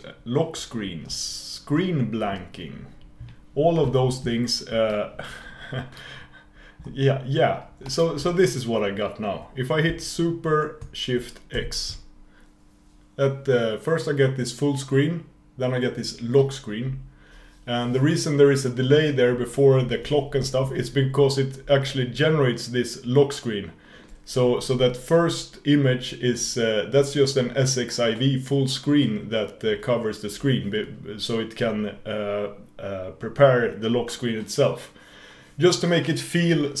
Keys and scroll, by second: 11.6 shift+super+x.